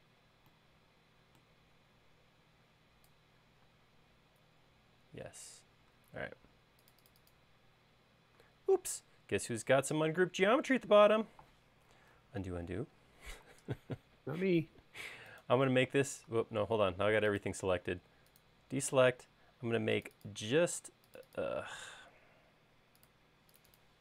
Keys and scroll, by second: 4.1 space, 12.5 super+z, 22.5 Escape, 22.8 Escape.